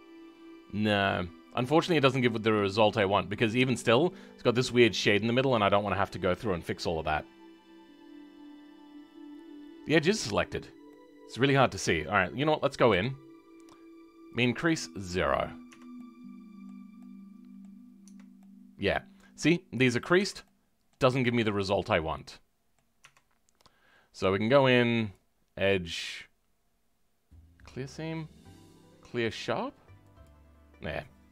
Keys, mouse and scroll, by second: 3.0 scroll down 3, 3.3-10.1 middle drag, 10.1-10.5 scroll up 2, 10.9-12.8 middle drag, 12.8 a, 15.2-15.6 scroll down 2, 15.6 Tab, 15.9-18.0 middle drag, 18.0 Tab, 18.3-20.1 middle drag, 20.1 Tab, 20.4-23.0 middle drag, 23.0 Tab.